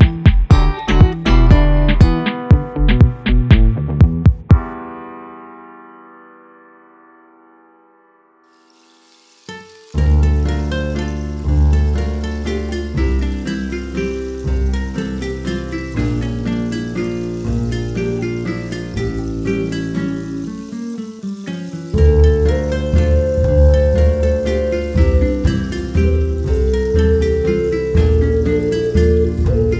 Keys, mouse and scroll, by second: 1.6-2.0 shift+middle drag, 2.0-2.4 scroll up 6, 2.4-3.4 shift+middle drag, 3.4-4.6 drag, 4.9-7.1 drag, 7.1 middle click, 7.4 shift+a, 9.2 ctrl+t, 9.4 middle click, 9.7-10.1 drag, 10.1-11.1 middle drag, 11.3-12.5 drag, 12.5 scroll down 1, 12.8-13.6 shift+middle drag, 13.6 shift+a, 16.5-19.0 drag, 19.0 KP_0, 19.1 KP_0, 19.6-20.5 drag, 21.8-22.3 drag, 22.3 shift+a, 24.0-24.5 drag, 26.0-27.7 drag, 27.9 drag, 29.0-29.6 drag, 29.6 middle click.